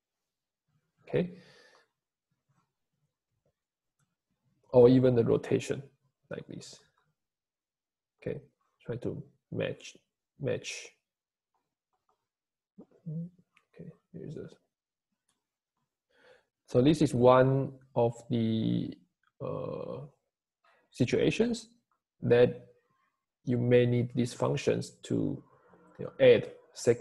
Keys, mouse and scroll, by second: 14.3 `, 15.4 click, 19.9 click.